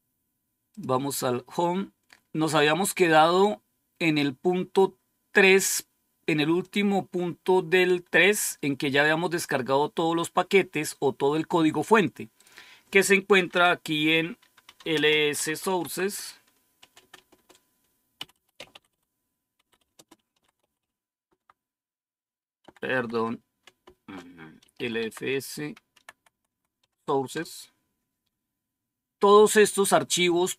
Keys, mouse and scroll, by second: 0.6 click, 2.3-3.1 scroll down 1, 3.5-3.9 scroll down 1, 4.1-4.8 scroll down 1, 4.8-6.5 scroll up 2, 6.5 click, 8.7-9.9 scroll down 2, 9.9-11.7 scroll down 1, 12.2 click, 14.3-27.7 typing.